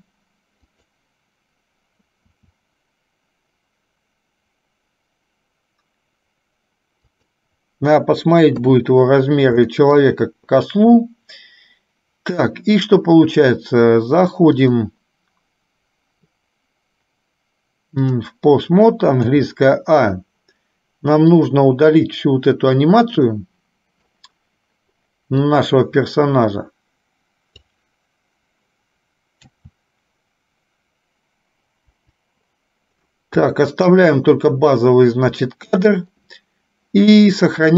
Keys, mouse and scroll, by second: 2.4 s, 8.5 KP_3, 10.0 shift+middle click, 14.9-18.4 drag, 19.5 a, 21.4-23.0 drag, 23.4 middle click, 25.5-27.8 drag, 32.0 Delete, 33.7 shift+middle click, 35.7 middle click.